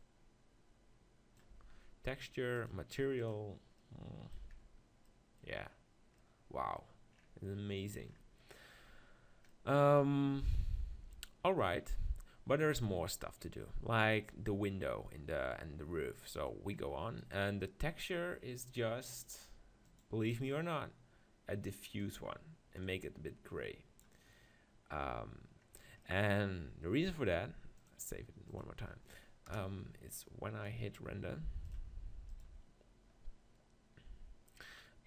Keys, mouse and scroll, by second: 1.5 Tab, 3.3 click, 4.0 middle click, 4.7-11.3 middle drag, 13.0-17.2 middle drag, 17.2 right click, 20.0-24.5 drag, 24.9-28.0 middle drag, 28.0-29.6 drag, 29.6 KP_0, 30.6-31.7 middle drag, 31.7-34.3 drag.